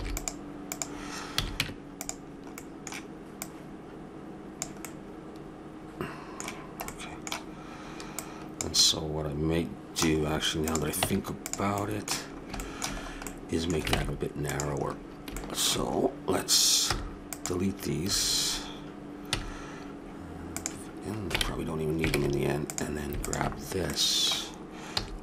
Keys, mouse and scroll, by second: 1.3 a, 1.6 Tab, 2.6-4.2 middle drag, 4.4 click, 4.8-6.0 middle drag, 6.1 middle click, 8.1-9.9 drag, 9.9 middle click, 10.2 middle click, 10.6 middle click, 10.6-11.8 drag, 11.0 Tab, 13.9 ctrl+Tab, 16.9 c, 19.3 x, 22.1 ctrl+Tab, 23.2 right click, 23.9-25.0 middle drag, 25.0 s.